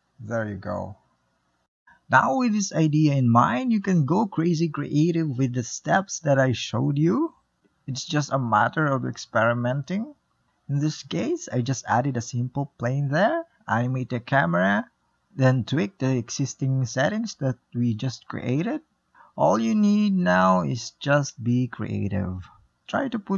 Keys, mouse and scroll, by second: 0.0-0.7 middle drag, 0.7 click, 1.1-1.5 scroll up 4, 1.5 middle click, 2.1-3.0 scroll up 1, 3.0 scroll up 1, 3.2-7.2 typing, 6.2 scroll up 1, 6.3 middle click, 7.3 click, 7.5 click, 7.6 click, 7.8 shift+middle click, 8.3 shift+a, 8.3 scroll down 2, 8.4 ctrl+alt+KP_0, 8.5 shift+middle drag, 8.8 q, 8.9-9.5 ctrl+shift+middle drag, 9.5 r, 10.0-10.5 shift+middle drag, 10.8 click, 11.9-14.0 typing, 12.0 click, 12.3 click, 12.8 click, 13.5 click, 15.7 space, 15.9 space.